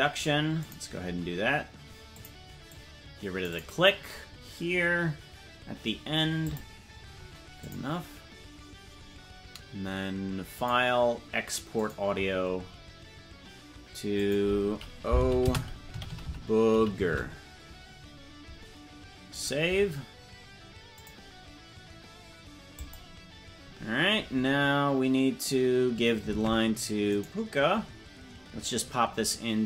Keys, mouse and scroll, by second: 26.5 ctrl+Tab, 27.5 right click.